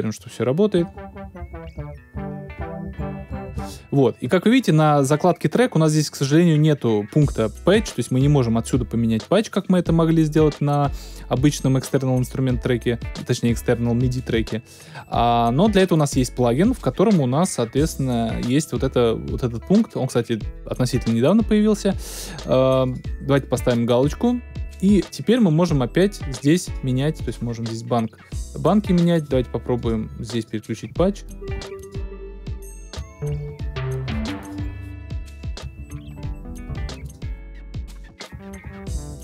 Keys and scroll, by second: 0.0 Return.